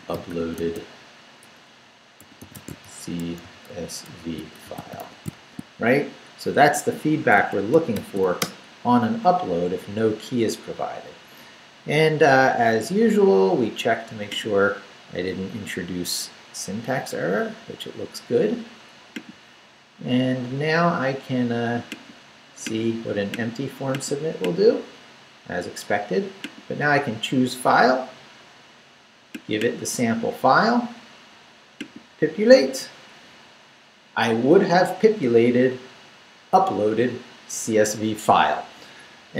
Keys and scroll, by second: 0.0-5.8 typing, 7.3 Escape, 7.9 shift+;, 8.2 shift+w, 8.4 Return.